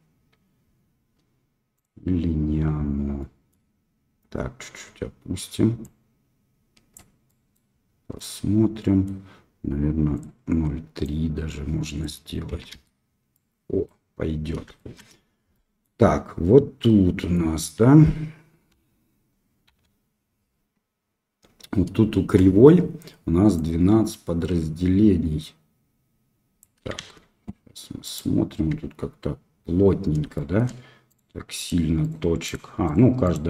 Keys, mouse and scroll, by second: 1.8 click, 3.1-3.5 middle drag, 5.8-6.9 drag, 7.2 middle drag, 8.1 middle click, 13.3-13.8 middle drag, 14.0 middle click, 14.7 shift+middle drag, 15.5-15.8 middle drag, 16.4-17.3 middle drag, 18.7 KP_1, 23.5-26.6 drag, 26.9 shift+z, 28.0 click, 28.8 Tab, 30.3 shift+middle click, 31.0 click, 31.5 click, 32.0 click, 32.4 click, 32.8 click, 33.2 click.